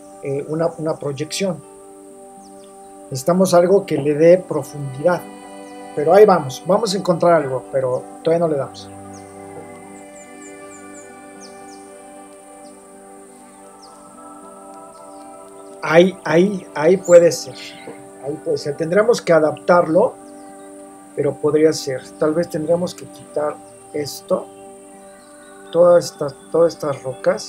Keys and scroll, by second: 11.6 super+c, 12.5 super+t, 12.7 super+-, 13.6 shift+Return, 13.9 super+0.